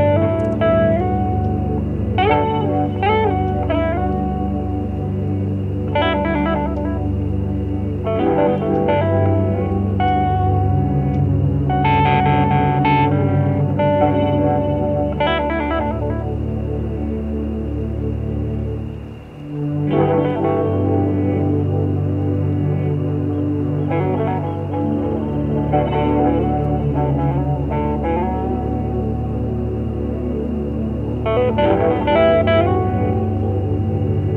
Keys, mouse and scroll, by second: 0.7 shift+click, 2.1 shift+click, 3.7-4.8 shift+drag, 5.0 shift+click, 6.5-7.7 shift+drag, 8.4 shift+click, 8.8-9.9 shift+drag, 9.9 shift+middle click, 10.6-11.8 shift+drag, 12.3 shift+click, 13.5 shift+click, 15.7 shift+click, 16.0 shift+click, 17.1 shift+middle click, 18.5 shift+click, 19.6 shift+click, 21.1 shift+click, 22.0 shift+click, 22.3 shift+middle click, 22.9 shift+click, 23.6 shift+click, 24.4 shift+click, 24.9 shift+click, 25.3 shift+click, 25.8 shift+click, 26.6 shift+click, 28.4 shift+click, 29.0 shift+click, 29.4 shift+click, 31.6 shift+click, 31.9 shift+click, 32.7 shift+click, 33.1 shift+click, 33.4 shift+click, 33.8 shift+middle click.